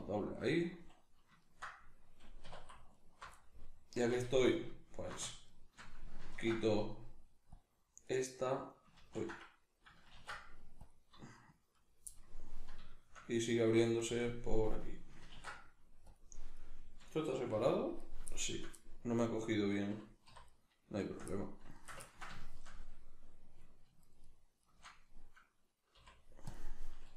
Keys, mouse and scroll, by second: 2.5 2, 3.0 alt+right click, 3.4 middle click, 4.4-5.6 alt+shift+right drag, 6.3 ctrl+e, 8.1 right click, 9.0 ctrl+z, 11.8 right click, 12.1-14.0 middle drag, 14.0 shift+right click, 15.3 ctrl+e, 16.6 right click, 17.6 g, 18.1 right click, 18.3-19.4 shift+middle drag, 19.4 right click, 20.3 3, 20.5 right click, 21.3 middle click, 21.7 shift+right click, 22.1-24.0 ctrl+shift+middle drag, 24.0 shift+right click, 24.2 shift+right click, 24.6 shift+right click, 25.9 x.